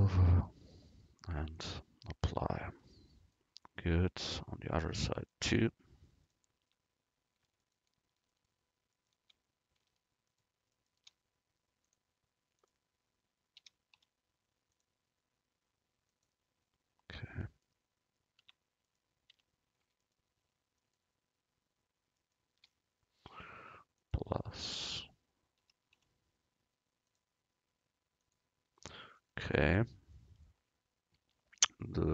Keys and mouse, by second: 1.6-3.4 drag, 2.4 Tab, 4.4 middle click, 6.3-10.0 drag, 6.7 Tab, 11.0 right click, 11.9-14.7 drag, 11.9 right click, 16.2-17.9 drag, 18.5 Tab, 18.9 right click, 19.4 Tab, 22.6-24.0 right drag, 24.0-26.8 drag, 28.3-29.9 drag, 31.3 Tab.